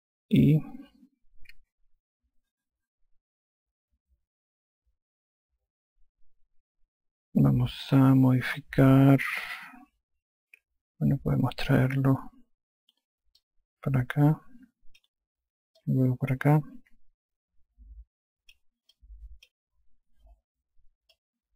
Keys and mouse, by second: 0.2 alt+click, 14.4 click, 16.8 click, 20.0 alt+click.